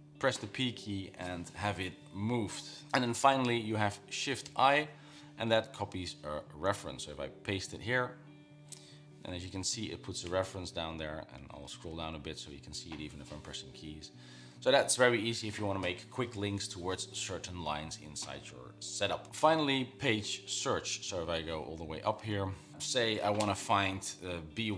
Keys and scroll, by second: 0.1 typing, 4.9 shift+y, 6.5 Down, 7.5 p, 10.7 Down, 11.2 Down, 11.8 Down, 12.6 Down.